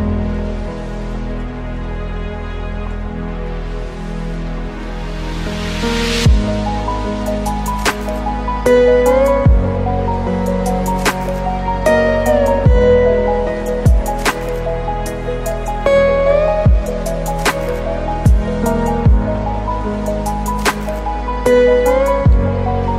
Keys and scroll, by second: 2.1 ctrl+t, 11.4 ctrl+space, 15.8 ctrl+0, 18.8 ctrl+z.